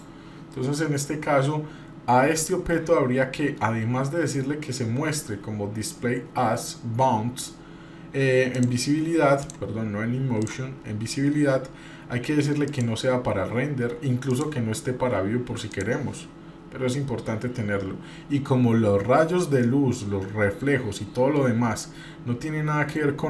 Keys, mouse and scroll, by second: 2.3 click, 7.3 middle click, 7.3-8.4 scroll up 3, 8.4 scroll up 1, 8.5 click, 9.4 click, 10.4 click, 10.8-12.4 scroll down 3, 12.7 click, 14.3 click, 15.7 click, 17.1-17.7 scroll down 3.